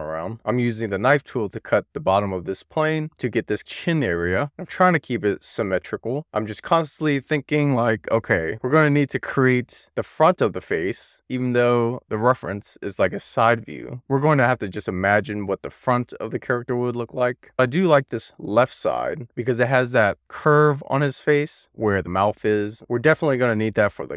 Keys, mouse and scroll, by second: 0.6 k, 3.9-4.3 scroll down 1, 4.3 k, 10.1 k, 17.5 3.